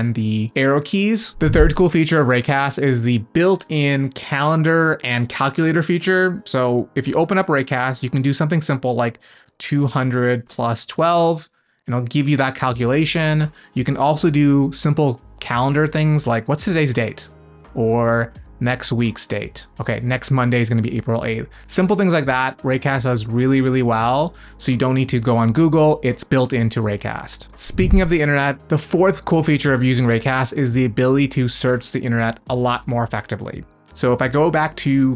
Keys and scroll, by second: 7.1 super+space, 22.3 BackSpace, 34.1 super+space.